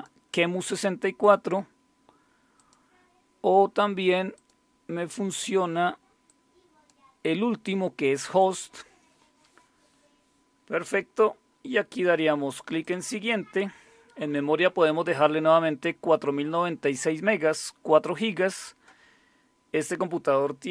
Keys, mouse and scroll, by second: 1.2 click, 2.6 click, 4.3 click, 6.3 click, 8.4 click, 12.8 click.